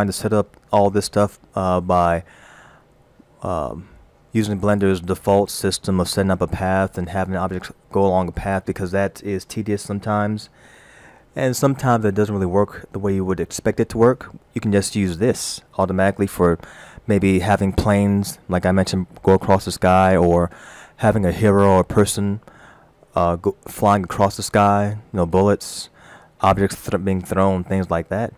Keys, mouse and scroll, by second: 17.5-18.0 scroll down 2.